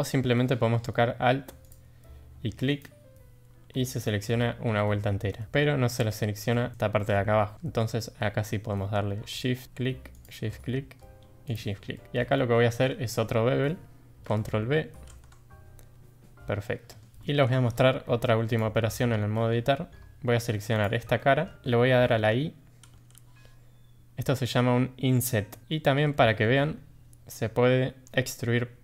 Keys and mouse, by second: 2.7 alt+click, 4.5 middle drag, 5.3 middle click, 6.5 middle drag, 7.1-7.5 middle drag, 8.5 middle click, 10.1 shift+click, 10.6-11.0 middle drag, 11.9 middle click, 12.4-12.7 shift+drag, 14.8 ctrl+b, 16.3 middle click, 17.2 shift+middle click, 18.3 3, 18.9 middle drag, 19.4 shift+middle drag, 20.7 click, 21.2 middle drag, 22.9 i, 25.7 shift+middle click, 26.1 middle click, 27.3 middle click, 28.5 e.